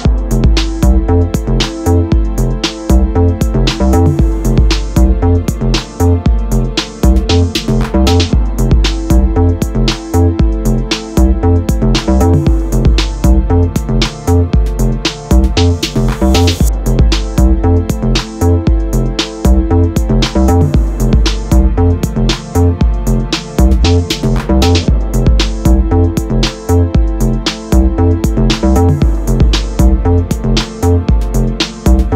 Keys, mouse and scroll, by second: 23.9-29.2 drag, 27.7 m.